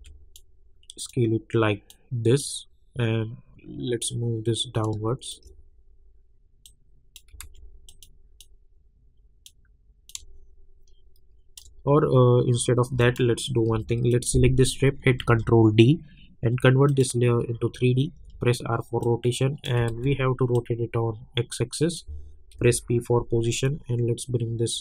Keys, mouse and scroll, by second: 0.3-6.6 drag, 6.6 click, 7.4 ctrl+z, 7.9-10.1 drag, 8.7 click, 10.4 shift+click, 15.2 ctrl+d, 16.9 click, 18.1 r, 19.0 click, 19.9 ctrl+z, 20.5-22.5 drag, 22.5 p, 23.6-24.8 drag.